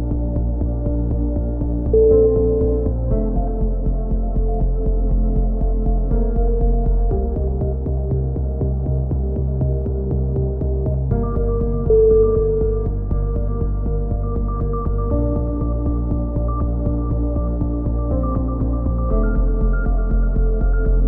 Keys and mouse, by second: 0.6 n, 1.4-3.9 middle drag, 3.9-5.8 drag, 5.3-7.4 typing, 8.9-10.0 drag, 9.4 e, 10.2 click, 13.1 c, 14.1-15.1 drag, 16.6-17.6 drag, 17.9 click, 20.7 a.